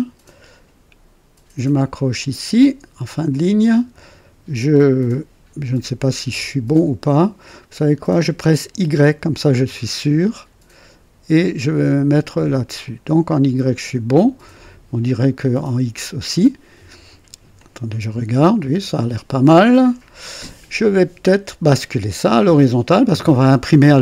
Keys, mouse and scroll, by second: 3.2 click, 6.2 scroll up 2, 8.9 y, 12.7 click, 14.0 scroll down 2, 14.4-15.5 right drag, 17.5-19.7 drag, 19.9 KP_3, 22.0-23.1 right drag.